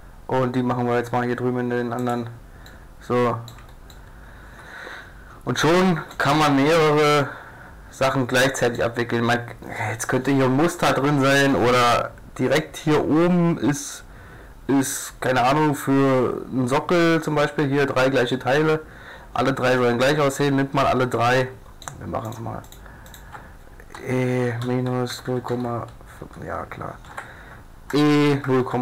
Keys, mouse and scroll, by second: 2.7 click, 2.7 middle click, 2.9 click, 3.3 middle click, 3.4 click, 3.6 a, 4.9 click, 5.6 click, 7.2 middle click, 8.0 click, 8.3 middle click, 8.5 middle click, 12.6-14.4 middle drag, 21.4 middle click, 21.4 click, 21.5 middle click, 21.6 click, 21.7 middle click, 21.8-25.1 drag, 24.0 e, 27.1 ctrl+z, 28.1 e.